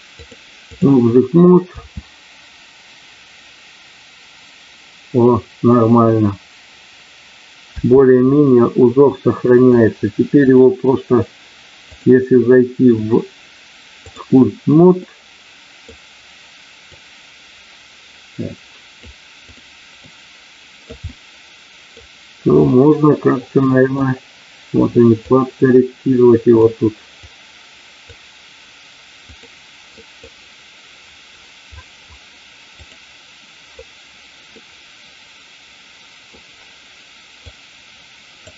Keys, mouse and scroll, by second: 0.3 click, 1.8 space, 7.7 space, 9.5 click, 10.5 click, 11.9-14.2 drag, 15.0 middle click, 16.9-19.0 drag, 19.5 click, 20.0 click, 21.1 middle click, 22.7-24.0 middle drag, 25.2-26.6 drag, 27.2 click, 29.2 click, 30.0 middle click, 32.7 click, 34.5-36.2 middle drag, 37.3 click.